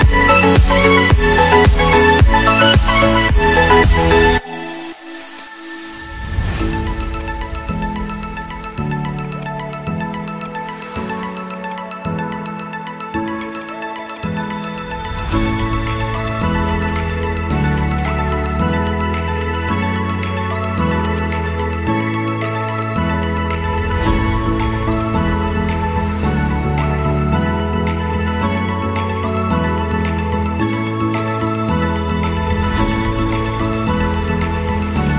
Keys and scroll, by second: 1.1 F3, 3.8 ctrl+z, 4.4 ctrl+g, 5.4 c, 6.0 shift+F2, 6.3 Escape.